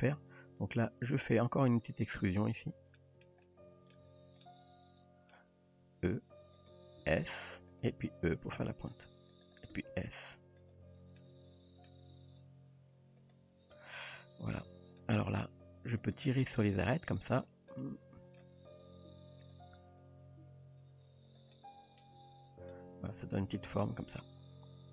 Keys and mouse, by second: 1.1 click, 1.9 click, 3.0 shift+middle drag, 3.4-4.0 middle drag, 4.4-5.3 middle drag, 6.1 e, 7.0 s, 8.0 e, 9.7 s, 11.2 middle click, 12.2 g, 14.0-14.6 middle drag, 15.0 middle click, 16.0 click, 17.3 click, 17.7 middle click, 19.1 g, 20.0 click, 20.5 g, 21.6-22.0 middle drag, 22.2 Tab, 22.7-23.8 middle drag, 24.1 Tab.